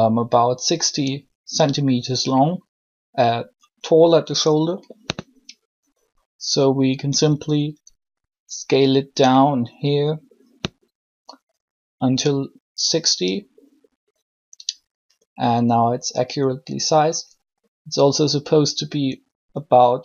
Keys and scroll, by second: 6.9 s.